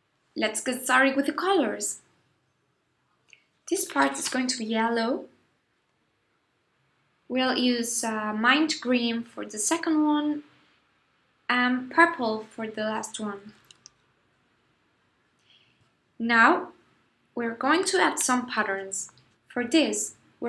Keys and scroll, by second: 0.5 shift+super+g, 19.6 super+c, 20.0 super+f.